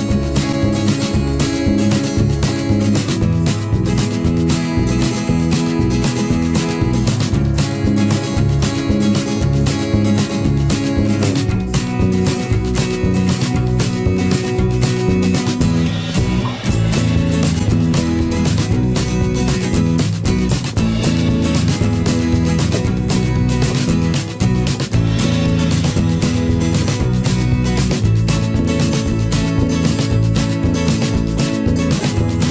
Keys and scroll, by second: 26.1 Return.